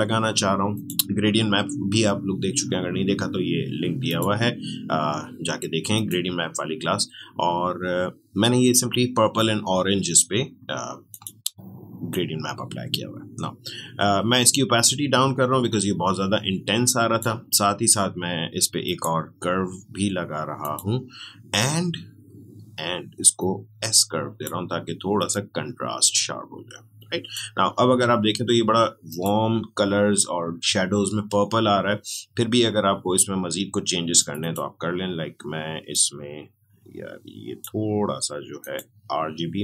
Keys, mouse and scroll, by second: 4.0 click, 11.1-18.8 drag, 23.3-29.1 drag, 34.1-38.5 drag.